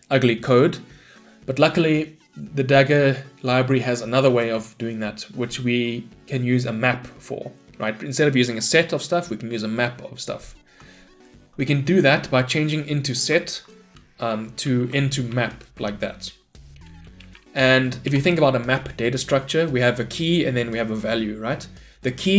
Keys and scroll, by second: 11.5 Escape, 13.4 ctrl+BackSpace, 17.3 Return.